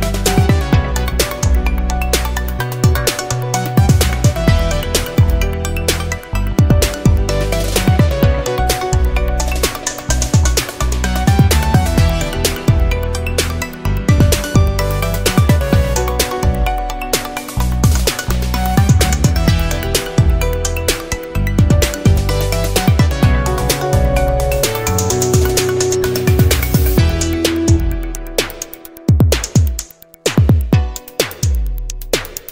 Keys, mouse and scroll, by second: 0.4 click, 1.8 click, 2.5 click, 3.5 click, 4.1 click, 5.2 middle click, 5.8 middle click, 6.2 middle click, 6.8-8.5 drag, 8.5-8.9 scroll down 1, 9.1 scroll up 1, 10.5 click, 11.5 ctrl+click, 12.3 click, 13.7 click, 14.4 click, 15.1 ctrl+click, 16.1 ctrl+click, 16.8 ctrl+click, 18.8-23.0 drag, 23.6 click, 24.2 ctrl+click, 24.8 ctrl+click, 25.2 ctrl+click, 26.8 click, 31.5 click, 32.0 click.